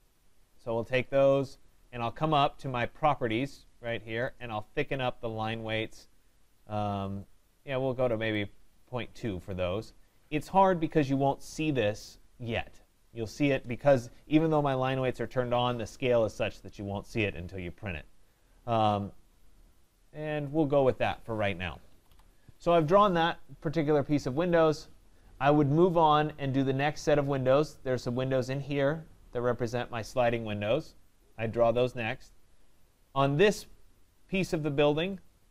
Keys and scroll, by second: 21.8 Escape.